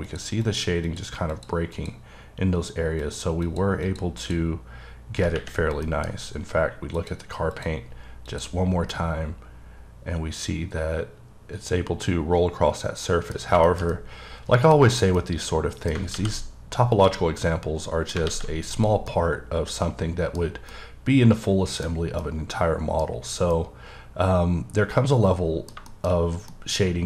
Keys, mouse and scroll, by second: 0.1 click, 0.5 click, 0.9 click, 1.3 click, 1.8 click, 3.0 click, 3.5 click, 3.9 click, 4.2 click, 5.5-5.9 scroll down 3, 5.9 middle click, 7.0 click, 7.5 click, 8.3 click, 8.9-12.6 middle drag, 13.4 scroll down 2, 13.7 middle click, 13.9 double middle click, 14.9-15.2 scroll up 1, 15.2 middle click, 16.2 alt+x, 16.9 click, 17.4 middle click, 18.3 alt+x, 18.8 click, 19.1 middle click, 20.4 scroll down 2, 20.7 middle click, 21.9 scroll down 1, 22.2 middle click, 23.1-23.6 scroll up 3, 23.6 middle click, 25.9 shift+middle click.